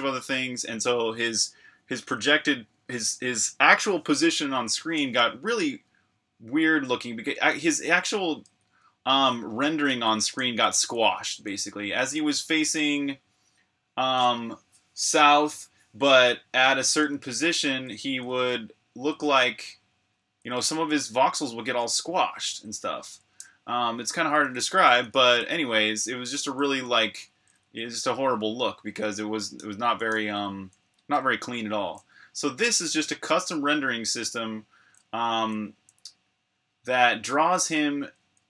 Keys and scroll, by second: 7.3-12.6 typing, 16.4-21.2 typing, 24.0-32.0 typing, 33.2-36.1 typing, 38.1-38.4 typing.